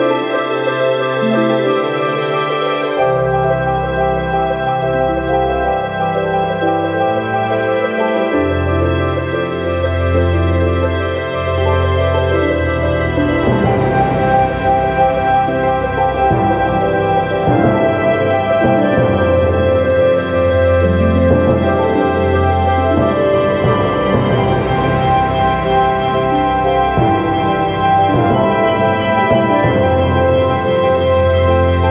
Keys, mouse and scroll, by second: 0.2 click, 1.5-3.4 drag, 3.7 scroll up 1, 4.6-7.1 drag, 7.9 click, 8.3 click, 9.2 click, 10.5 0, 11.0 scroll down 2, 12.3 click, 13.3 ctrl+click, 14.7 click, 17.0 click, 18.5 click, 20.1 click, 20.9 click, 22.3 click, 23.8 click, 24.8 click, 25.9 click, 26.5 ctrl+click, 27.2 ctrl+click, 29.3 click, 31.3 click.